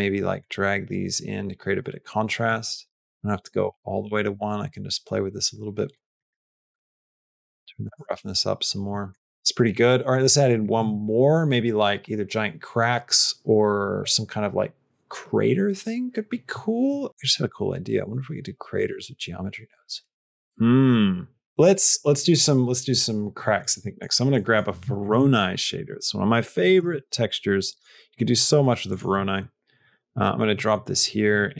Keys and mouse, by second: 0.3-1.7 drag, 2.4-5.8 drag, 6.1 middle click, 6.9 click, 8.8 middle click, 9.1 middle click, 9.5 middle click, 10.1 middle click, 23.8 middle click, 24.3 middle click, 24.9 shift+a, 29.2 middle click, 29.7 click, 30.0 click, 30.5 middle click, 31.2 click.